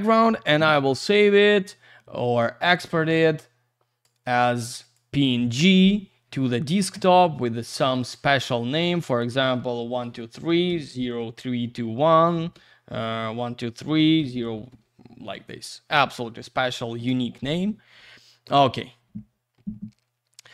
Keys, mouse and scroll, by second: 1.2 click, 4.8 click, 4.9 click, 7.9 click, 8.0 click, 9.0 click, 9.2 click, 9.9 1, 11.2 3, 12.9 typing, 15.4 ctrl+a, 16.9 Return.